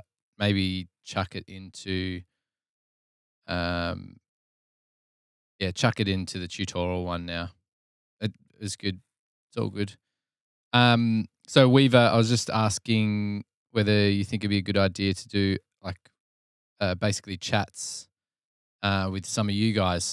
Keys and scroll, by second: 8.9 super+Tab, 9.6 super+Tab.